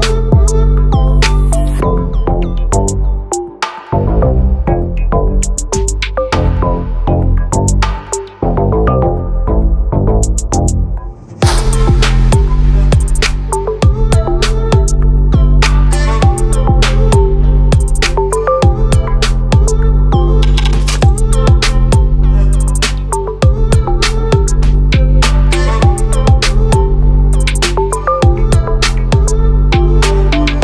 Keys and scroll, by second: 23.2 ctrl+a, 27.1 ctrl+t.